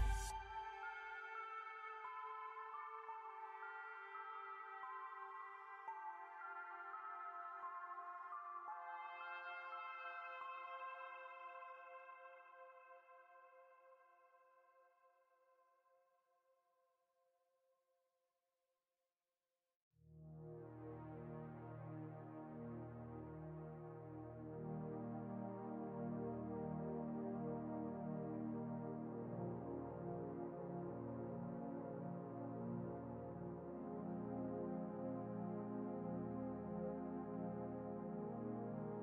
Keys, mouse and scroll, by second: 5.1 g, 7.7 ctrl+e, 11.2 ctrl+click, 12.1 ctrl+alt+click, 25.1 ctrl+e, 25.8 ctrl+shift+n, 36.1 ctrl+d.